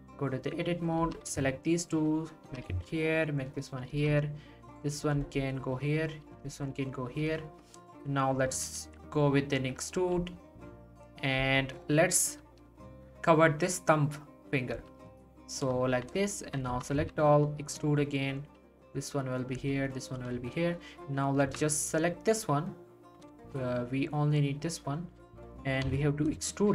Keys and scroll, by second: 1.3 x, 2.5 g, 2.7 x, 3.9 g, 8.8 e, 10.1 g, 16.7 e, 17.0 z, 18.6 g, 21.4 z, 25.8 1.